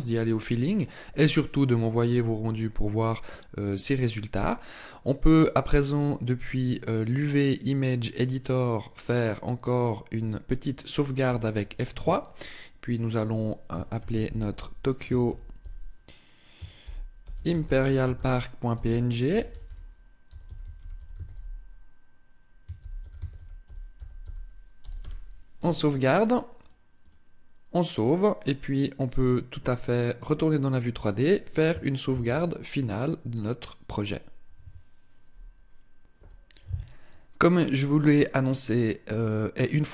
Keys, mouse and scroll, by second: 32.1 ctrl+s.